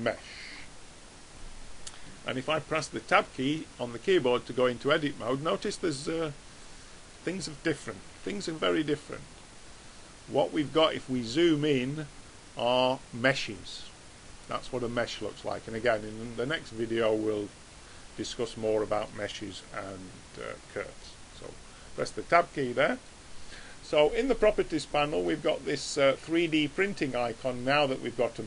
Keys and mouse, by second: 3.6 Tab, 4.9-6.7 middle drag, 6.9 middle click, 8.5 a, 14.4 middle click, 15.1-19.9 middle drag, 21.6 Tab, 22.5-24.8 middle drag, 27.6 click.